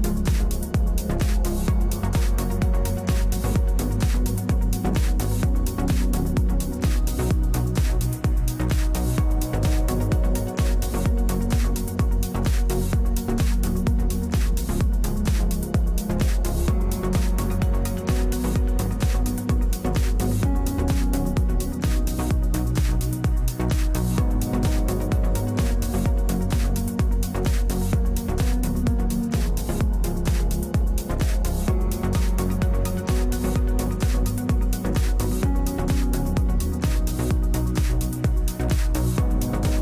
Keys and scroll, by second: 6.4 space, 7.2 space, 14.7-16.0 v, 18.3-19.7 v, 23.4 space, 24.7 space, 26.3 4, 34.0 space, 34.8 space.